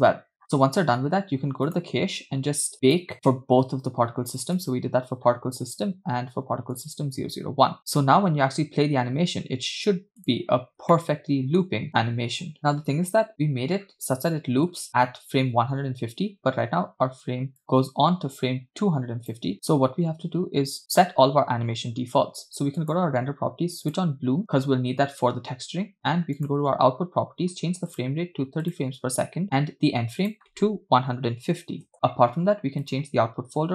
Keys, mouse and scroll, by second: 0.4 scroll up 7, 1.8 click, 2.1 scroll down 3, 2.9 click, 3.1-3.8 scroll up 6, 4.8 click, 5.2-5.9 scroll down 5, 6.8 click, 8.4 space, 10.2 drag, 10.9-11.6 middle drag, 12.8 space, 14.0 scroll up 3, 14.7-17.4 scroll up 3, 17.7 click, 22.9 click, 24.0 click, 26.4 click, 28.0-28.8 drag, 30.3-31.9 drag.